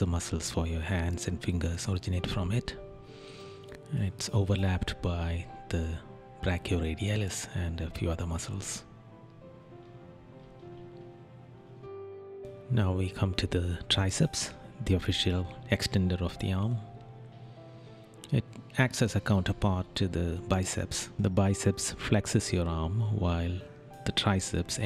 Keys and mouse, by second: 3.5 right click, 9.6 right click, 13.0 right click, 17.6 right click, 19.6 right click, 22.9 right click.